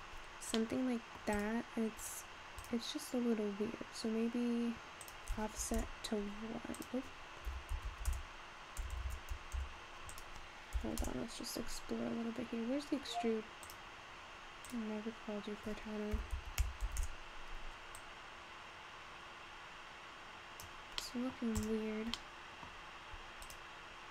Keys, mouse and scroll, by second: 0.2-0.6 scroll down 2, 0.6-1.3 middle drag, 1.3 click, 2.0 click, 2.6 click, 5.0-8.8 drag, 8.8-9.1 BackSpace, 9.6 BackSpace, 10.1-12.6 drag, 12.6-13.1 scroll down 4, 13.7-16.8 drag, 17.9-21.1 drag, 21.1-21.4 middle drag, 21.4 scroll up 1, 21.6 click, 22.2-23.0 middle drag, 23.0-23.4 scroll up 1, 23.4 click.